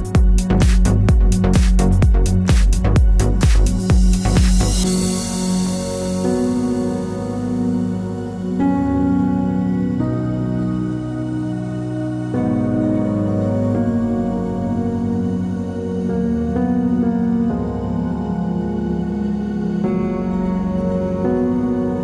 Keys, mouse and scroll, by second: 5.3-7.9 drag, 8.9-9.8 drag, 10.0-12.6 drag, 13.8-18.6 drag.